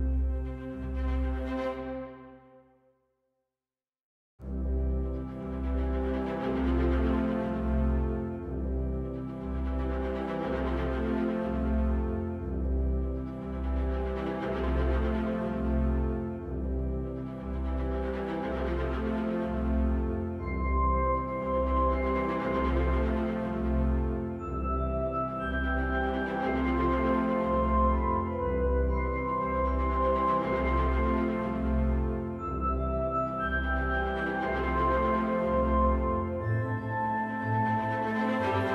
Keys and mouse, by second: 2.7 right click, 10.4 right click, 14.1 click, 17.2 click, 28.1 click, 30.1 right click, 34.1 click, 35.4 click, 35.9-37.5 right drag.